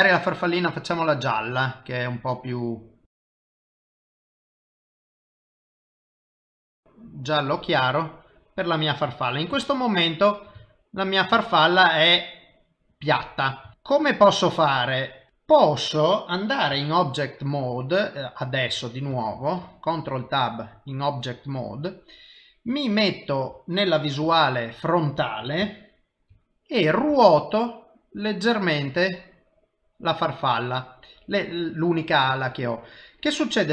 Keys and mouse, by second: 2.1 click, 5.7 click, 7.9 middle click, 9.7 shift+middle click, 11.4 shift+middle click, 11.9 middle click, 14.2 middle click, 15.3 middle click, 19.1 ctrl+Tab, 21.5 middle click, 24.3 KP_1, 25.7 shift+middle click, 27.1 r.